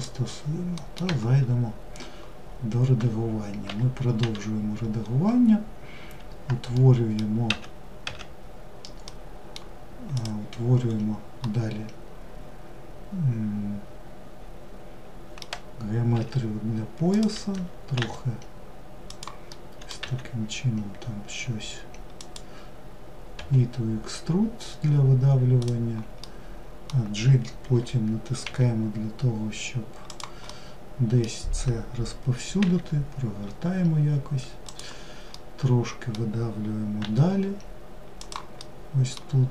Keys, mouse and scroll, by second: 0.2 middle click, 0.5 Tab, 4.5-6.2 scroll up 2, 6.2-6.9 middle drag, 6.9 w, 8.5-9.6 middle drag, 9.6 click, 10.3-10.8 scroll up 2, 10.8-15.6 middle drag, 15.6 s, 18.9 middle click, 19.4 e, 25.6-27.2 middle drag, 27.2 f, 29.9-32.1 middle drag, 32.1 r, 34.7-36.4 middle drag, 38.0-39.5 middle drag.